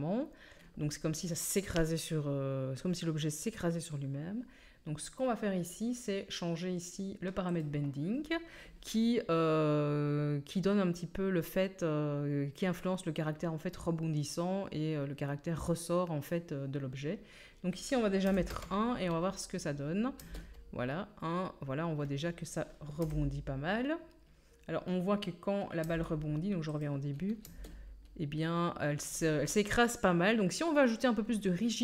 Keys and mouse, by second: 7.5-19.5 drag, 7.5-19.5 middle drag, 20.2 space, 23.0 KP_1, 25.8 space, 27.4 space.